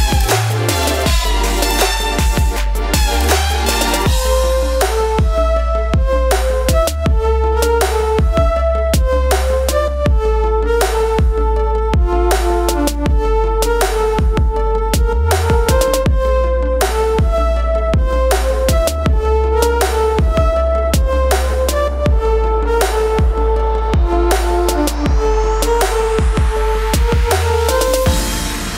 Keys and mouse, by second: 15.3 ctrl+z, 16.5 ctrl+z, 17.6-23.6 drag.